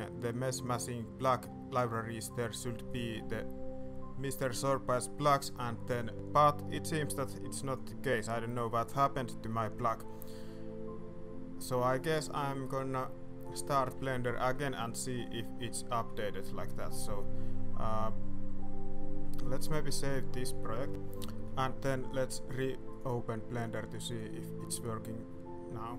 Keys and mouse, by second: 12.1 middle click, 12.6 shift+middle click, 12.9-13.5 middle drag, 13.7 shift+middle click, 14.2 middle click, 14.5 shift+middle click, 15.1 middle drag, 15.2 middle click, 15.6 shift+middle drag, 15.8 middle drag, 17.0 click, 20.0 ctrl+s, 21.3 middle click.